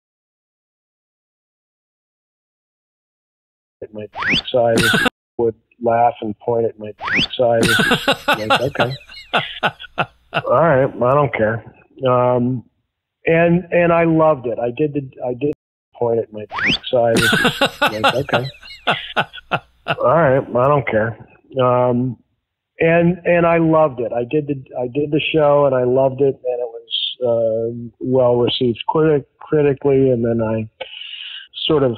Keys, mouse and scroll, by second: 3.6 click, 3.7 space, 5.0 space, 5.2 click, 5.3 space, 8.8-11.9 drag, 14.5 click, 15.4 space, 15.8 click, 15.9 space, 21.8 ctrl+s.